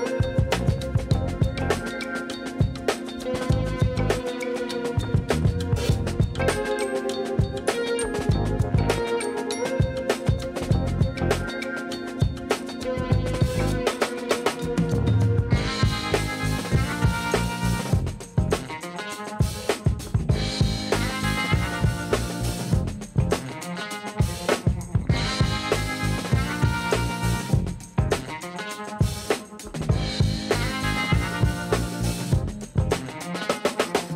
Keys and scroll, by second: 9.5 6, 9.6 Return, 24.1 g.